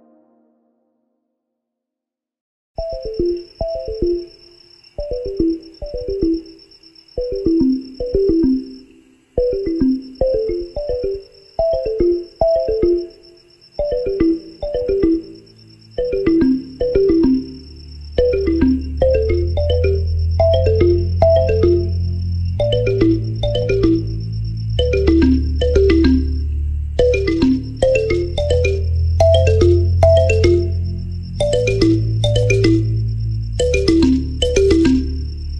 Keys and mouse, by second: 0.0-1.8 typing, 3.6 KP_1, 3.6 KP_3, 4.9 r, 5.3 g, 6.8-9.5 drag, 8.1 s, 8.8 s, 9.5-13.1 middle drag, 10.8 KP_1, 10.8 KP_3, 11.4 g, 13.1-27.1 drag, 20.0 KP_1, 20.8 shift+d, 26.4 z, 27.1-29.8 middle drag, 27.2 z, 28.0 shift+d, 28.4 s, 29.8-33.1 drag, 31.2 KP_1, 31.2 KP_3, 32.0 g, 33.1-35.5 middle drag, 33.4 s, 34.9 KP_1, 35.0 KP_3.